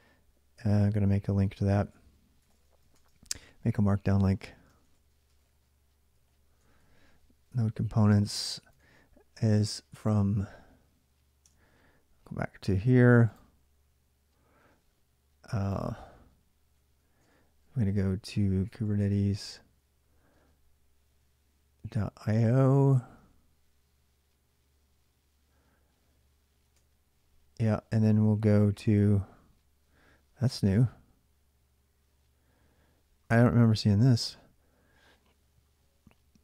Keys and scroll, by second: 0.0-9.0 typing, 18.2-19.4 typing, 26.4 Return.